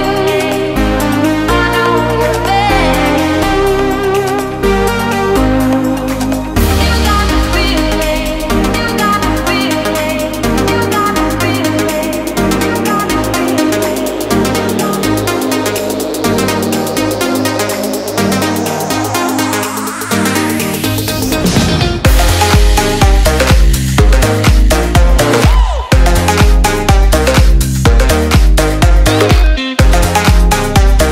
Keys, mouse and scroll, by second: 2.1-2.6 scroll down 1, 2.6 click, 3.5 KP_Add, 3.7 KP_9, 4.9 Return, 5.2 KP_Add, 5.5 KP_9, 6.8 click, 8.1 Tab, 8.3 click, 8.7 alt+Tab, 11.2 click, 11.6 alt+Tab, 12.1 click, 12.6 Tab, 13.0-14.0 scroll down 1, 14.0 click, 14.7-15.1 scroll down 1, 15.1 click, 15.8 alt+Tab, 16.6 click, 17.0 alt+Tab, 17.8 click, 18.0 Return, 18.6 click, 21.7 click, 23.0-23.8 scroll down 1, 23.8 click, 26.8 alt+Tab, 28.3 click, 30.4 click.